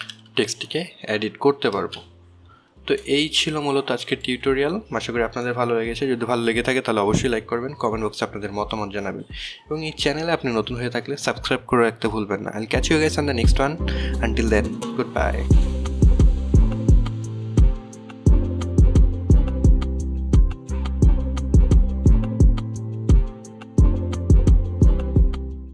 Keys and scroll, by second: 1.2-2.4 typing, 3.8 ctrl+z.